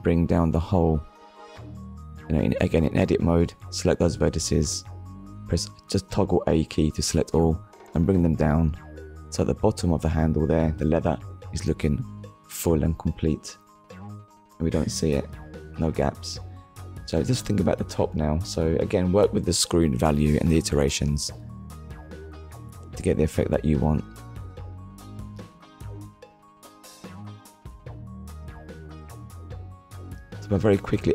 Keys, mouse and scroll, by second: 3.2 click, 6.9 middle click, 11.2 middle click, 14.8 click, 14.8 shift+click, 18.8 KP_1, 20.3 scroll up 1, 22.3 click, 23.6 click, 27.7 click.